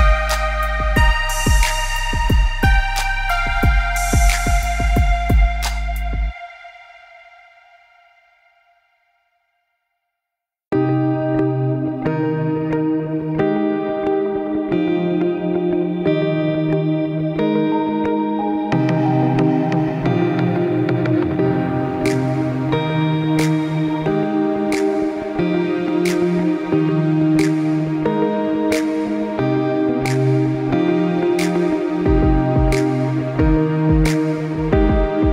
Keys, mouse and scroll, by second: 0.0 middle click, 0.3 click, 0.9 click, 1.5 g, 2.7 click, 3.1 click, 3.3 middle click, 4.0-4.4 scroll up 2, 4.4 middle click, 5.1 click, 5.6 click, 6.6 shift+a, 8.1 middle click, 8.9 s, 9.7 middle click, 10.1-11.0 scroll up 4, 10.4 middle click, 11.0 r, 12.5 scroll up 1, 12.5 middle click, 13.4 middle click, 17.6 ctrl+z, 17.9 ctrl+z, 18.2 ctrl+z, 18.5 middle click, 19.0 scroll down 2, 19.4 shift+a, 21.5 middle click, 21.5-22.1 scroll down 1, 22.1-22.7 scroll down 3, 22.1 s, 22.9-23.3 scroll up 6, 23.5 click, 25.6 click, 26.2 click, 26.8 click, 27.8 click, 29.1 scroll down 2, 29.3 middle click, 30.4 r, 32.7 middle click, 33.9 r.